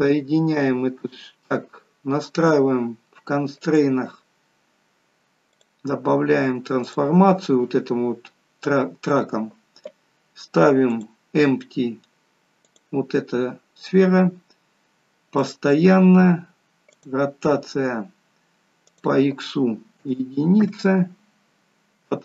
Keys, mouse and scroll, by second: 3.7 click, 5.6 click, 10.9 click, 15.5 click, 17.0 click.